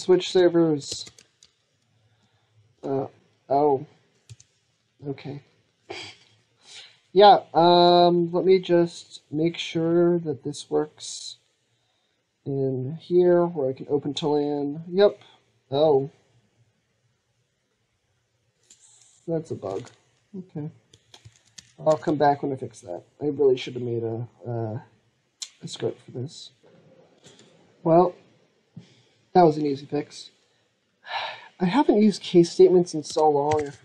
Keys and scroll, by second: 1.3 ctrl+Tab, 1.7 ctrl+Tab, 1.8 ctrl+Tab, 1.9 ctrl+Tab, 1.9 ctrl+Tab, 1.9 ctrl+Tab, 19.6 alt+Tab, 21.1 alt+Tab, 21.4 alt+Tab, 21.7 alt+Tab, 26.5 ctrl+z, 26.5 ctrl+s.